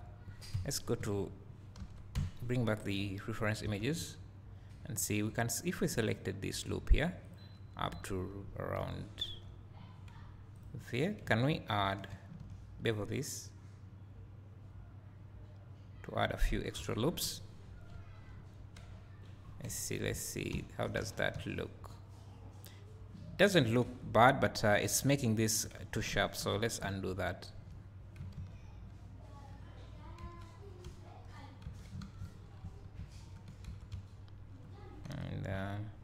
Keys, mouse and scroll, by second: 0.5 KP_1, 1.0 KP_3, 1.8 Tab, 2.2 KP_Divide, 2.9-3.7 scroll down 2, 3.7 Tab, 4.7 scroll up 1, 5.1 2, 7.3 ctrl+click, 8.5 scroll down 2, 9.6 scroll up 2, 10.6 ctrl+click, 12.1 ctrl+b, 16.4 click, 16.8 Tab, 17.2 KP_1, 17.9 `, 19.6 KP_Divide, 20.1 Tab, 21.1 Tab, 21.3 `, 23.9 Tab, 26.2 ctrl+z, 28.4 ctrl+z, 30.3 Tab, 30.8 `, 31.7 Tab, 32.1 ctrl+z, 33.7 Tab, 33.9 `, 35.1 KP_Divide, 35.5 KP_1.